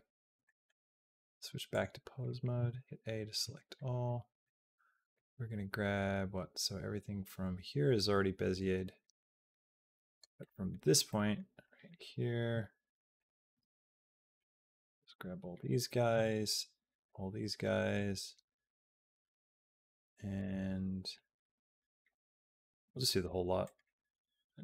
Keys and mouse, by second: 0.2 click, 0.5 middle click, 1.6 click, 2.4 a, 3.6 middle click, 5.0-10.0 drag, 10.3 middle click, 10.9 middle click, 11.5 middle click, 13.0 click, 13.4 b, 17.8-20.2 drag, 17.8 b, 20.3 b, 22.6 b, 23.4-24.6 right drag.